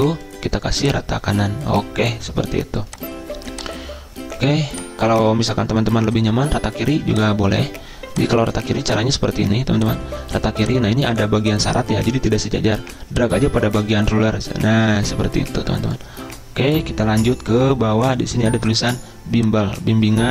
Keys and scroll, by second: 8.7 ctrl+a.